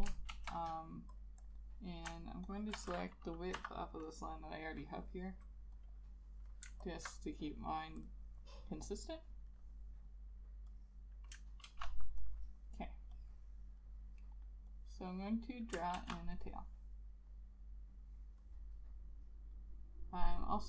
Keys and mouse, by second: 0.4 ctrl+z, 1.5 double click, 2.6 ctrl+click, 3.7 i, 7.0 alt+click, 11.8 ctrl+z, 16.1 ctrl+z.